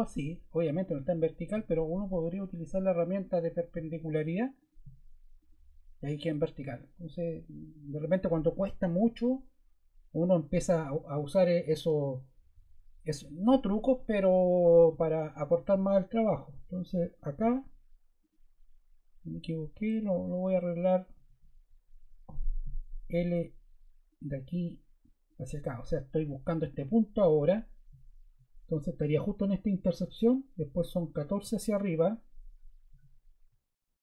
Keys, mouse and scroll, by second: 1.1 scroll, 19.8 super+z, 21.2 super+z, 24.0 click, 25.2 click, 26.2 scroll, 32.8 l.